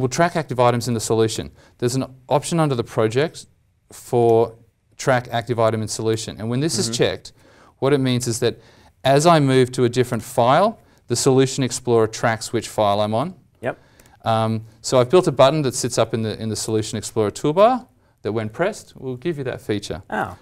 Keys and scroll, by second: 0.7 alt+t, 15.9 alt+Tab, 20.1 alt+Tab, 20.3 alt+Tab.